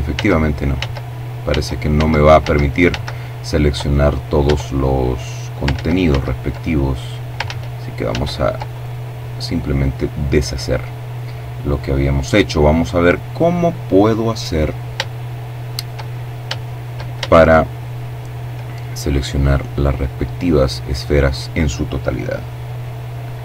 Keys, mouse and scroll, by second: 0.2 z, 3.2 Tab, 4.0-4.6 scroll down 2, 4.5 ctrl+z, 6.2 ctrl+z, 7.4 right click, 13.9-14.9 shift+middle drag, 14.9-15.5 shift+scroll up 2, 16.1-17.7 shift+middle drag, 22.7 b, 22.9-23.4 drag.